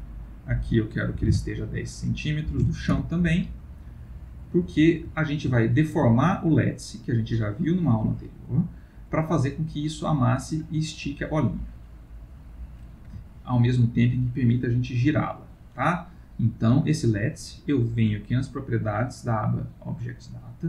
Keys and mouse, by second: 0.2 click, 4.0 middle click, 5.0 ctrl+middle click, 5.6 middle click, 7.0 middle click, 7.2 ctrl+middle click, 10.3 middle click, 13.2 ctrl+middle click, 13.3 ctrl+middle click, 13.3 ctrl+middle click, 14.1 middle click, 14.2 middle click, 18.3 click.